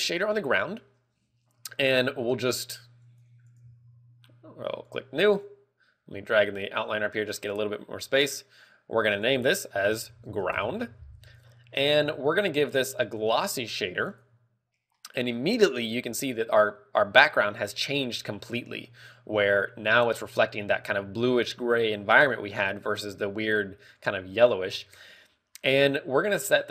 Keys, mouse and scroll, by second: 14.7 click.